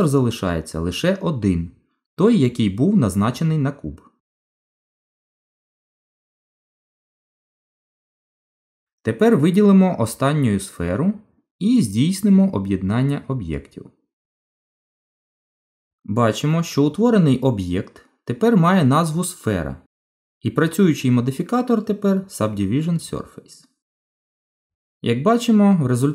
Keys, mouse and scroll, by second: 5.6 ctrl+z, 6.8 click, 8.4 click, 10.9 shift+click, 14.0 right click.